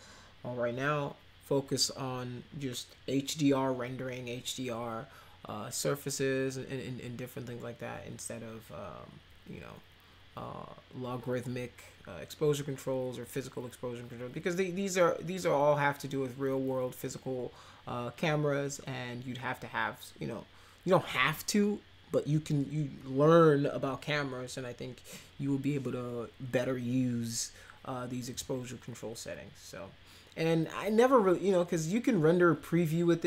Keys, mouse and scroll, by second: 28.3 click.